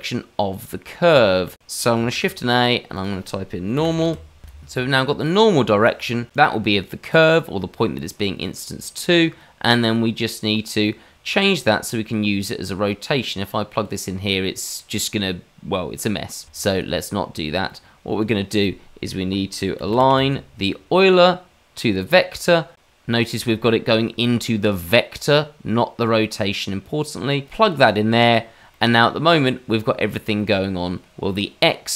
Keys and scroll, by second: 0.6 ctrl+z, 0.6 ctrl+z, 0.7 ctrl+z, 2.1 shift+a.